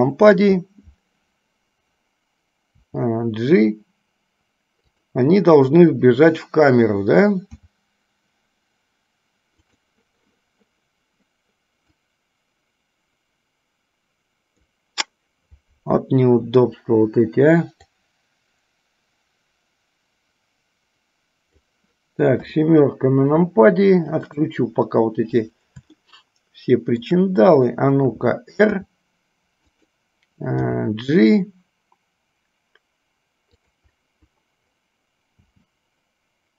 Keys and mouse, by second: 3.1 g, 7.7 s, 12.1-15.0 drag, 18.1-22.0 drag, 22.7 KP_7, 26.2-27.2 shift+middle drag, 28.8 r, 30.7 g, 35.5 g.